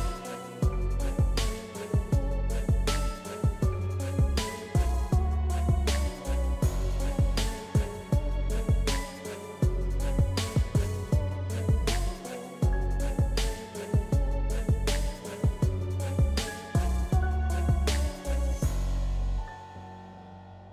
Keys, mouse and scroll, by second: 0.3-5.1 drag, 8.9-11.1 drag, 11.1-13.2 drag, 13.2 ctrl+z, 14.2 click, 15.3 ctrl+z, 15.8 typing, 16.2 click, 17.1 ctrl+z, 18.0 click, 20.3-20.7 drag.